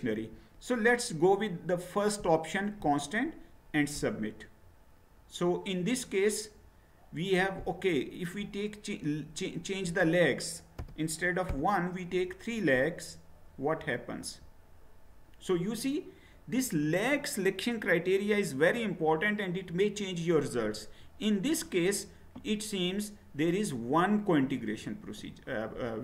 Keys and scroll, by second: 10.7 BackSpace, 11.5 3.